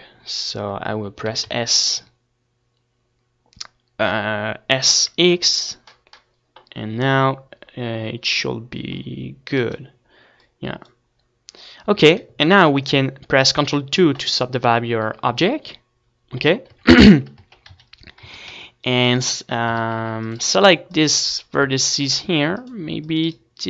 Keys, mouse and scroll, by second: 0.2 Tab, 0.8 Tab, 2.5 s, 6.4-8.8 right drag, 8.8-9.9 middle drag, 9.3 Tab, 9.9 right click, 11.8 a, 12.1 Tab, 14.4 ctrl+2, 16.5-18.5 typing, 17.4 Tab, 19.5-20.9 right drag, 19.8 a, 20.1 c, 20.9 click, 21.6 a, 22.0 c, 22.2 click, 23.2 right click.